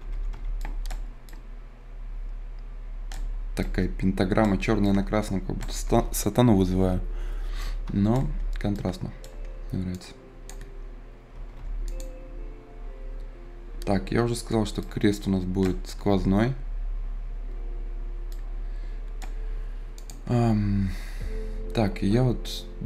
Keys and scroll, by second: 0.0 Escape, 11.3 Escape, 16.0 Escape.